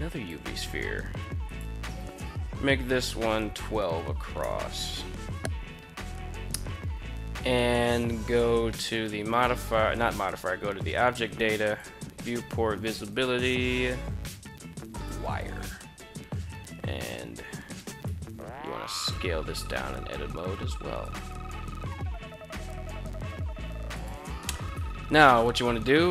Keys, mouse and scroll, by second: 0.9-4.6 drag, 8.3 click, 11.3 click, 12.6-14.8 drag, 17.5 Tab, 18.6 s, 20.6 click, 22.1 s, 23.4 click, 24.0 shift+middle click, 24.2 Tab, 25.6 shift+right click.